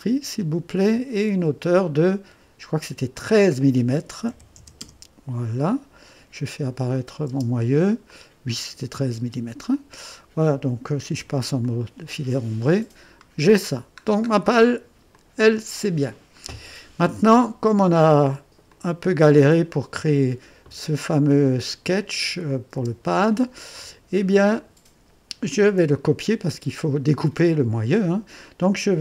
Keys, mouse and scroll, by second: 3.1 click, 4.3 KP_1, 4.6 KP_3, 4.8 Return, 6.9 click, 7.3 space, 8.1 click, 9.2 space, 9.7-10.7 drag, 11.2 space, 11.6-13.8 drag, 14.0 scroll down 1, 14.5 right click, 15.1-17.2 drag, 17.8 right click, 18.4 typing, 18.7 click, 21.9 click, 22.5 click, 22.8 space, 25.6-26.4 typing.